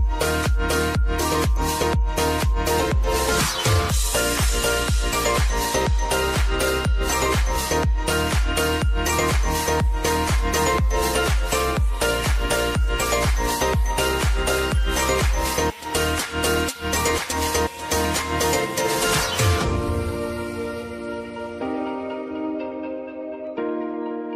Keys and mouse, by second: 3.5 space, 5.7-7.9 drag, 8.5 space, 9.8 click, 10.3 space, 13.0 click, 13.6 Return, 14.4 r, 15.3 Return, 17.0 click, 17.4 space, 20.4 click, 22.7 space.